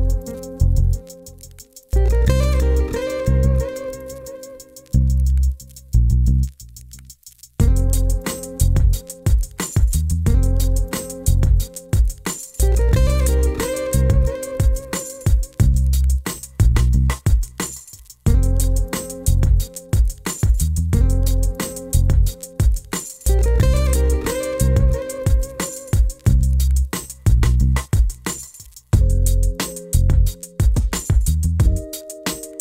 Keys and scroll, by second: 24.0 1, 24.2 5, 24.4 0.